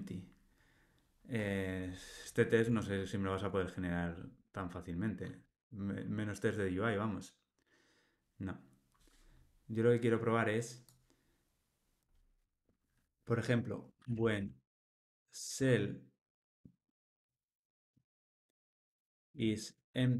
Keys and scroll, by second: 2.5 Tab, 5.4 Tab.